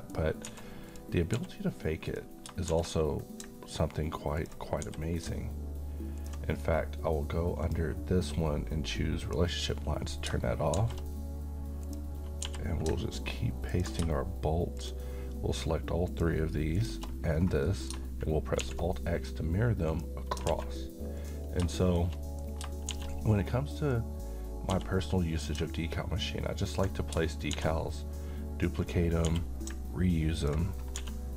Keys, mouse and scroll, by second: 0.1-0.5 scroll up 1, 0.5 s, 0.9 click, 1.4 g, 2.1 click, 2.7 shift+d, 4.4 ctrl+click, 4.8 g, 6.2 ctrl+click, 7.6 click, 10.8 d, 11.9 click, 12.4 g, 13.7 ctrl+click, 17.4 scroll down 1, 17.6 middle click, 18.6 alt+x, 19.9 click, 20.5 alt+a, 21.2 click, 21.7 middle click, 22.2 shift+middle click, 22.9 shift+d, 23.8 click, 23.8 click, 24.7 g, 26.7 ctrl+click, 27.5 d, 28.9 click, 29.3 g, 30.3 ctrl+click, 30.4 ctrl+click, 31.0 s.